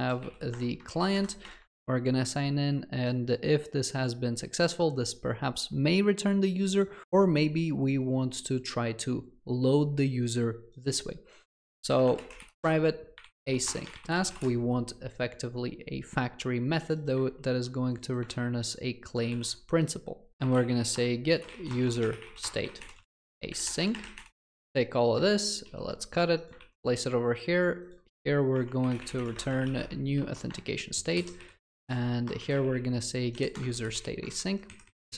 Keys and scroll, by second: 0.6 Return, 12.6 Return, 18.3 ctrl+c, 19.3 ctrl+v, 25.7 ctrl+x, 26.6 ctrl+x, 28.6 Tab, 30.5 Return.